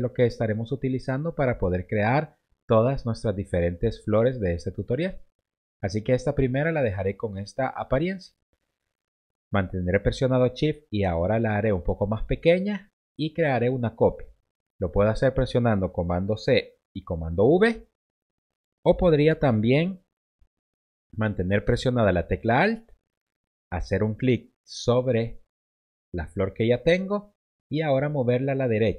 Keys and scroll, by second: 16.6 super+c, 17.1 super+v, 20.5 BackSpace.